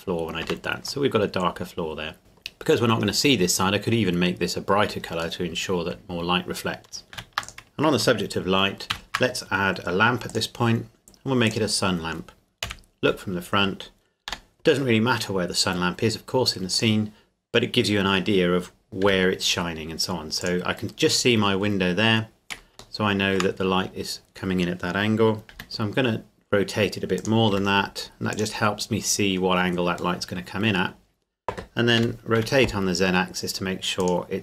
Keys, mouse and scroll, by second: 0.5 Tab, 1.1 middle click, 5.4 middle click, 6.0 scroll down 1, 7.1 ctrl+s, 7.4 click, 8.9 shift+a, 10.3 click, 12.6 KP_1, 13.3-14.3 scroll down 2, 14.3 g, 16.7 click, 19.1 r, 20.4 click, 21.7 scroll up 1, 23.0 shift+middle click, 23.9 scroll down 1, 25.5 r, 27.2 click, 27.5 g, 30.2 middle click, 32.0 r, 32.4 z, 34.0 click.